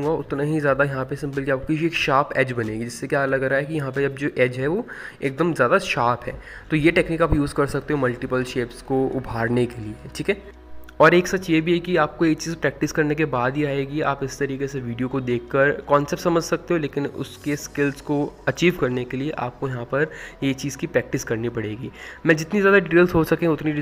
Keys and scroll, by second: 14.0 ctrl+z, 16.0 ctrl+z.